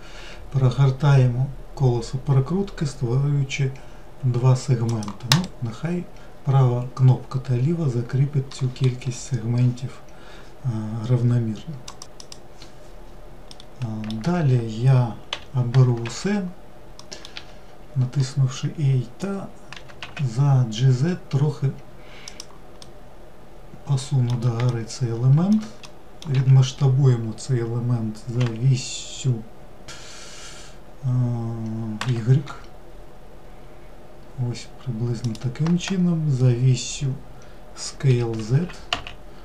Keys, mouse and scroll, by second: 13.2-15.0 middle drag, 15.0 3, 16.7 middle click, 17.0 a, 22.5-26.0 middle drag, 26.0 s.